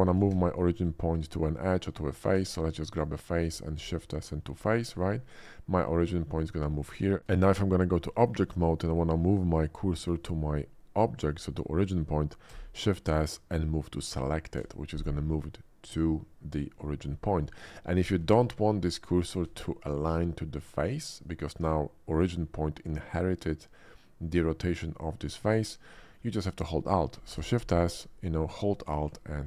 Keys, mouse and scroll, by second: 0.3 shift+s, 0.9 shift+s, 2.3 Tab, 2.9 click, 3.8 shift+s, 4.4 shift+s, 5.1 middle click, 5.5 middle click, 7.3 Tab, 8.0 shift+middle click, 8.6 shift+middle click, 12.5 shift+s, 13.1 shift+s, 18.2 shift+s, 18.8 shift+s, 21.0-21.4 middle drag, 25.4 middle click, 26.0 middle click, 27.4 shift+s.